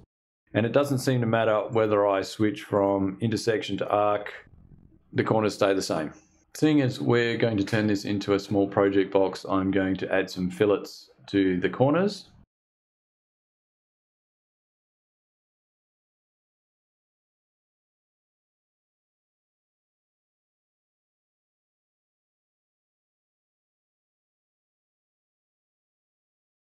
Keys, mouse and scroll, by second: 0.2 click, 1.2 click, 2.2 click, 3.2 click, 12.8 click, 13.3 ctrl+click, 13.6 ctrl+click, 13.8 ctrl+click, 14.2 ctrl+click, 14.6 ctrl+click, 14.9 ctrl+click, 15.2 ctrl+click, 15.6 click, 16.0 click, 16.3 click, 16.5 ctrl+click, 16.6 ctrl+click, 16.9 ctrl+click, 17.0 ctrl+click, 17.1 ctrl+click, 17.3 ctrl+click, 17.7 ctrl+click, 18.0 ctrl+click, 18.5 ctrl+click, 19.1 click, 19.7 click, 19.9 click, 20.0 click, 20.3-20.6 scroll up 1, 20.6 scroll down 1, 21.7 click, 22.4 click, 22.6 f, 23.0 click, 23.3 click, 24.1 click, 24.2 Delete, 25.5 ctrl+click, 25.7 ctrl+click, 25.9 ctrl+click, 26.0 ctrl+click, 26.1 ctrl+click, 26.3 ctrl+click, 26.5 ctrl+click.